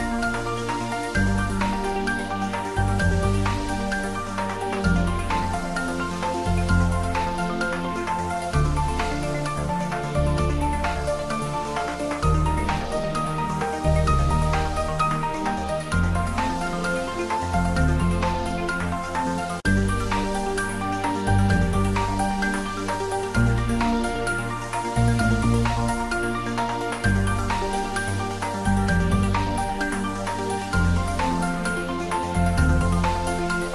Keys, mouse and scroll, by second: 1.4-2.3 scroll up 1, 5.2 ctrl+Num_Lock, 5.2 scroll up 1, 5.5 ctrl+s, 6.7-9.1 drag, 9.1-9.8 scroll down 1, 9.8-11.6 middle drag, 12.4 click, 14.8-15.4 scroll down 1, 15.4 s, 16.1 a, 16.4 s, 18.4 click, 19.0 g, 22.7 click, 23.0 s, 24.8 click, 26.5 s, 27.6 click, 28.1 Tab, 29.7 Tab, 31.9 scroll down 1, 32.8 s.